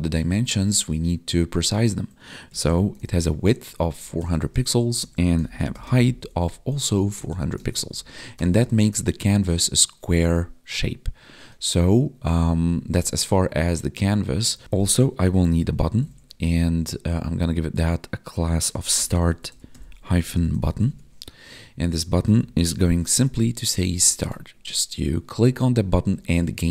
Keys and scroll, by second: 3.5 Tab, 4.6 Right, 4.8 space, 6.3 Tab, 7.6 ctrl+s, 7.8 Right, 8.6 ctrl+s, 12.4 Down, 13.0 Tab, 20.8 Tab, 23.8 ctrl+s, 24.2 Escape, 25.9 Right.